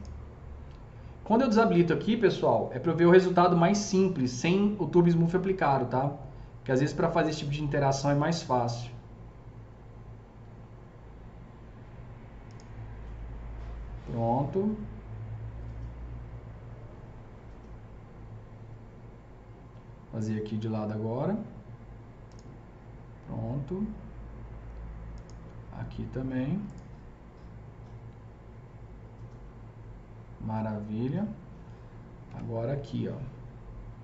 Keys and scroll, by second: 32.2 KP_0.